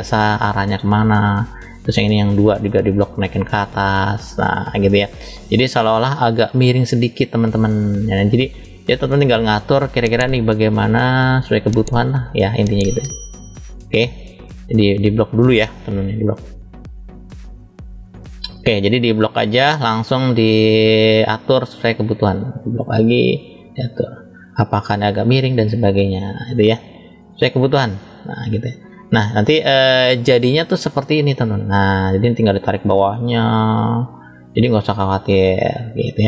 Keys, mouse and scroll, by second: 0.2 click, 0.5 click, 1.9 click, 3.3 click, 3.5 click, 9.6 click, 10.7 click, 12.0 click, 12.6 click, 12.8 click, 16.9 click, 18.6 click, 19.0 click, 20.0 click, 22.0 click, 23.4 click, 24.3 click, 24.9 click, 25.8 click, 26.8 click, 28.0 click, 29.3 click, 30.4 click, 33.2 click, 34.5 click, 35.5 click, 36.1 click.